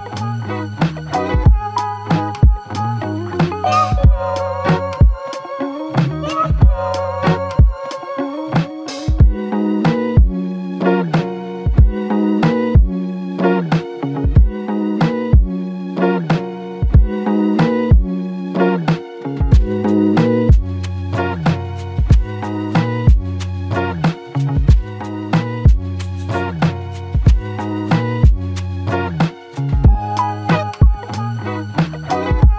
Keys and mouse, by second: 1.8 r, 11.0 shift+click, 19.6 alt+click, 20.2 shift+click, 22.5 alt+click, 23.3 ctrl+alt+click, 28.9 f, 30.2 alt+click.